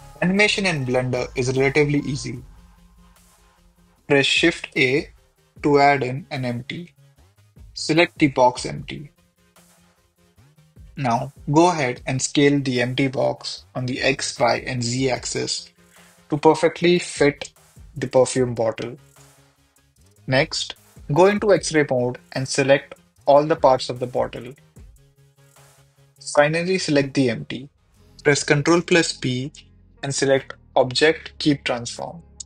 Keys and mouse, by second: 0.9 click, 2.5 h, 3.0-5.4 middle drag, 4.1 h, 5.5 shift+a, 9.6 KP_7, 10.2 g, 11.4 s, 12.4 s, 12.6 y, 13.7-15.1 typing, 14.8 drag, 16.8 s, 16.8 x, 17.8 g, 17.9 z, 20.0 shift+h, 22.2 click, 22.9 click, 23.6 shift+click, 25.2 shift+click, 25.9 g, 26.4 Escape, 29.1 ctrl+p.